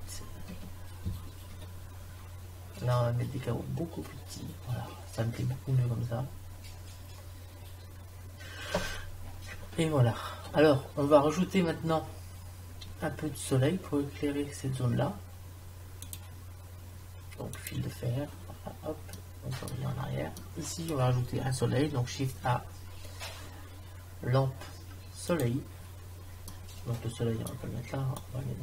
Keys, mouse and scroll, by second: 16.3 click, 22.3 shift+a, 26.5 middle click, 28.2 click.